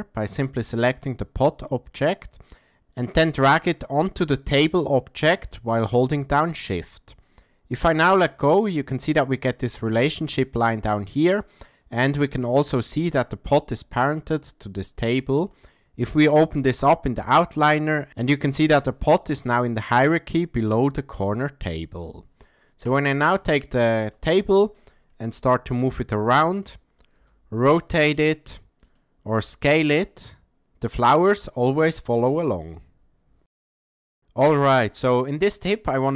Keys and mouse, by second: 0.8 click, 2.5 drag, 3.1-7.9 drag, 9.0-9.4 shift+middle drag, 15.4 click, 22.8 click, 23.4-24.1 shift+middle drag, 24.4 ctrl+middle click, 25.4 g, 27.2 r, 29.4 s.